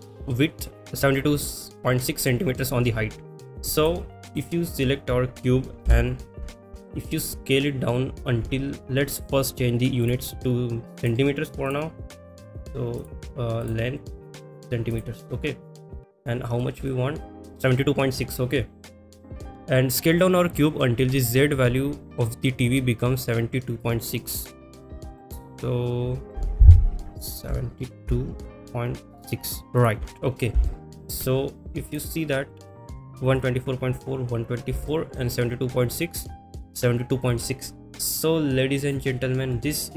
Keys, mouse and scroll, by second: 3.8 click, 4.3 click, 5.9 n, 6.9 middle drag, 10.0 click, 11.0 click, 11.6-12.3 drag, 13.0 click, 14.2-15.0 drag, 16.1 click, 16.9-17.2 shift+middle drag, 19.3 click, 30.6 shift+middle click, 31.9 click, 34.9 shift+middle click, 38.8 click, 39.5 middle click.